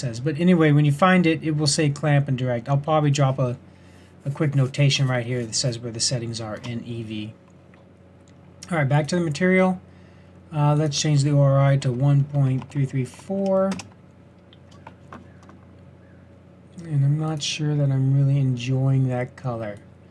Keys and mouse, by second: 9.0-12.8 drag, 12.8 KP_3, 16.7-17.7 middle drag.